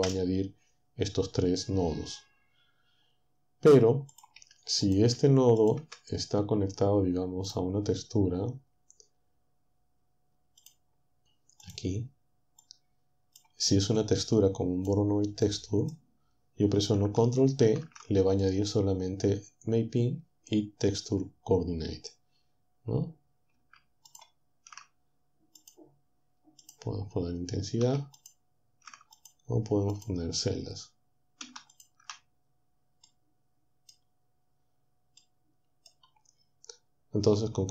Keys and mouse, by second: 4.2 click, 4.4 Delete, 5.2 Delete, 5.8 Delete, 10.6 click, 11.6-15.0 drag, 15.5 click, 17.6 ctrl+t, 24.1 ctrl+shift+click, 25.6 click, 26.6 click, 28.2 ctrl+shift+click, 29.2 ctrl+shift+click, 30.0 click, 31.8 ctrl+shift+click, 33.0-34.1 middle drag, 35.3-36.5 middle drag.